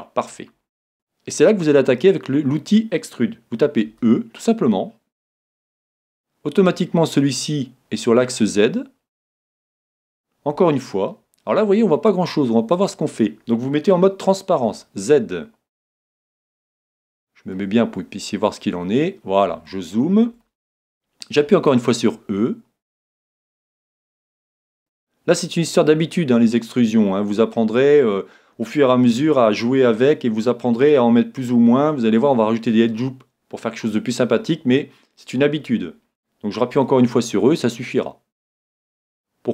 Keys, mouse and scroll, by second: 3.9 e, 9.3-11.0 drag, 10.5 e, 12.9-14.7 drag, 14.7 z, 15.9-18.7 middle drag, 18.9 middle click, 19.1-19.7 scroll down 1, 19.7-21.4 middle drag, 21.6 e, 23.8-25.3 drag, 36.7 e.